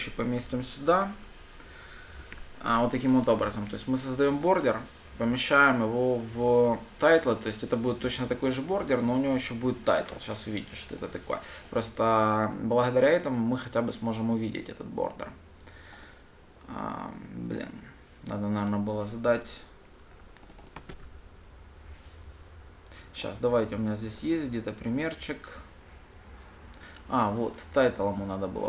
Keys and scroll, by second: 0.3 Return, 13.8 ctrl+shift+F10, 21.4 ctrl+c.